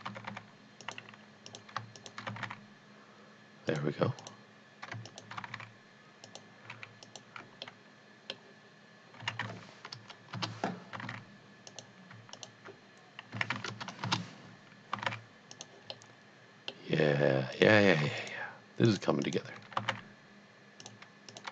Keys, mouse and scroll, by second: 0.1 g, 0.4 g, 0.8 click, 1.5 click, 2.0 shift+click, 2.3 g, 2.5 g, 3.7 click, 4.2 click, 5.0 shift+click, 5.4 g, 5.6 z, 5.8 g, 6.3 click, 7.0 alt+click, 7.7 middle click, 9.2 s, 9.4 z, 9.9 KP_0, 10.4 KP_Enter, 11.0 g, 11.1 z, 11.9 click, 12.3 alt+click, 13.4 s, 13.8 KP_0, 14.1 KP_Enter, 15.2 z, 15.5 click, 16.0 middle click, 16.3 middle click, 17.5 click, 18.2 shift+click, 18.9 shift+double click, 19.4 shift+click, 19.8 g, 19.9 z, 20.8 click, 21.3 click.